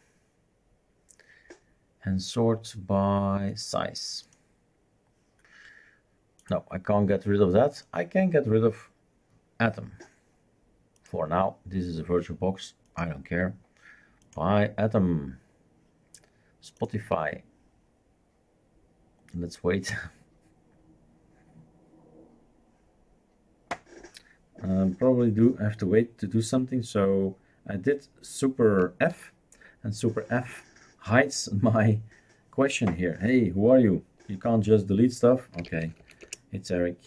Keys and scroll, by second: 29.2 super+space, 35.4-36.5 typing.